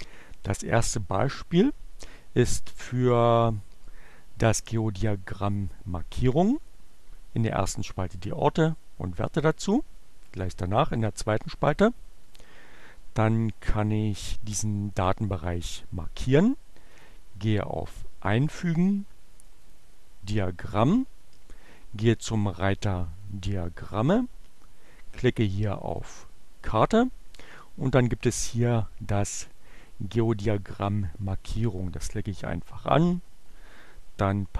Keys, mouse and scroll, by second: 12.1 click, 12.7-14.8 drag, 15.5-17.3 drag, 19.4 click, 22.7 click, 25.3-26.3 drag, 30.2 middle click, 33.6 click.